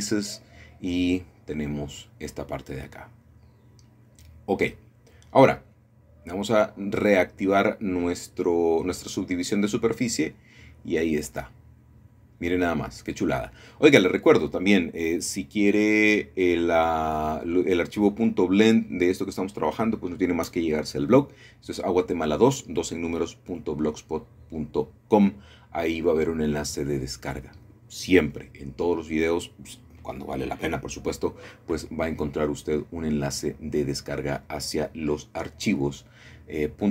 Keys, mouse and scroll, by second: 0.6 shift+click, 1.0 shift+click, 2.5-3.6 drag, 3.2-4.3 scroll down 1, 4.3-5.9 middle drag, 9.4-10.5 drag, 13.2 middle click, 13.3 middle click, 14.2 middle click, 15.9-16.9 middle drag, 16.2-17.1 scroll up 2, 17.5 shift+middle click, 18.1 click, 19.7 middle click, 20.1 click, 24.3 middle click, 27.4-28.5 shift+drag, 28.5-28.9 scroll down 1, 30.4-31.6 middle drag, 30.7-31.6 scroll down 1, 31.6-33.3 scroll up 1, 35.3 middle click.